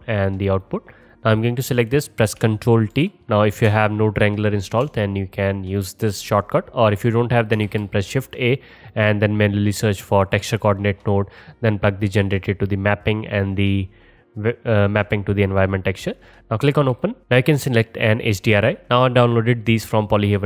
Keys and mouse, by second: 0.3-2.0 drag, 2.0-4.1 middle drag, 3.0 ctrl+t, 7.7 shift+a, 10.9-17.2 drag.